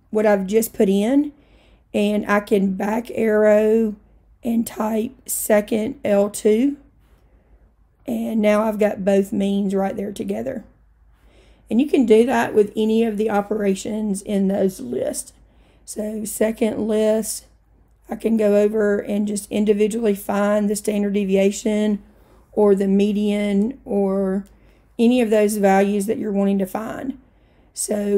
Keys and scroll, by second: 2.8 Left, 6.6 2, 8.0 Return, 18.4 Right, 18.8 Right.